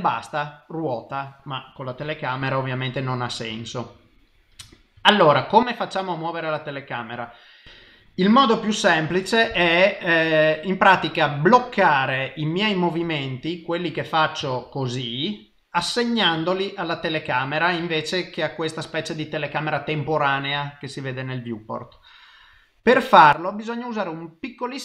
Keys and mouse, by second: 2.0 KP_0, 15.1 shift+middle click.